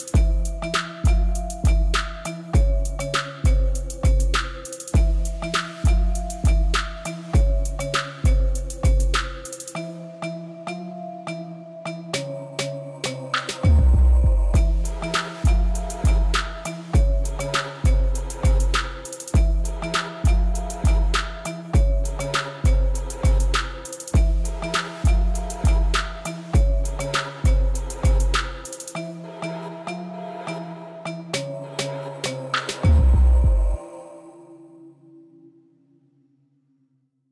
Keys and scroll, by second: 3.9 ctrl+c, 4.9 Tab, 7.7 ctrl+b, 7.9 ., 8.0 0, 8.2 5, 8.3 Return, 10.9-11.3 typing, 11.6 Return, 12.8 x, 13.2 ctrl+v, 22.1-25.5 typing, 27.4 s, 27.6 g, 35.0 Tab.